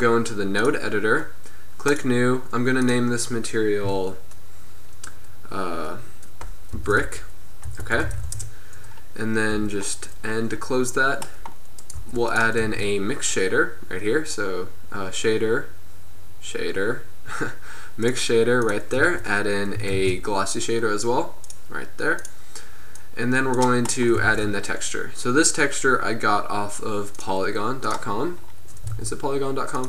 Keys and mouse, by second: 9.6 n, 11.9-12.9 drag, 12.0 g, 12.7 shift+a, 18.8 click, 20.0 shift+a, 23.0-27.3 drag, 24.3 shift+a.